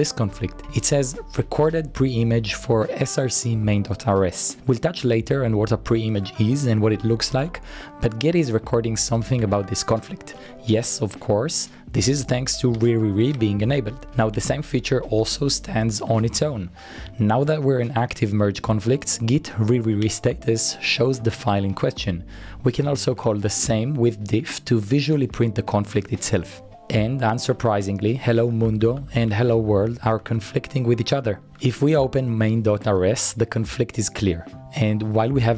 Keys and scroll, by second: 6.0-7.3 typing, 7.9 Return, 9.6-10.7 typing, 13.9-14.8 typing, 16.3-17.3 typing, 20.7 Up, 21.5 Return, 22.7-24.0 typing, 25.9 typing, 28.6-32.2 typing, 34.9-35.5 typing.